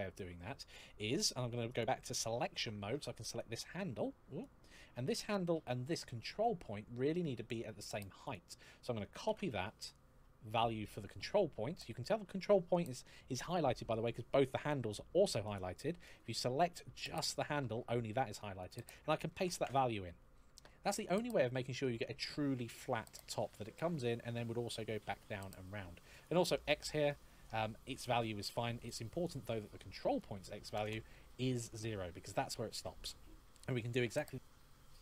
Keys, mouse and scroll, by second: 1.5 click, 3.0 right click, 4.1 click, 8.0 click, 9.0 ctrl+c, 15.2 click, 18.4 click, 19.1 ctrl+v, 26.1 click, 28.6 click, 30.5 KP_0, 30.7 Return, 32.9-33.3 scroll down 1, 34.1 shift+middle click, 34.1-35.0 scroll up 1.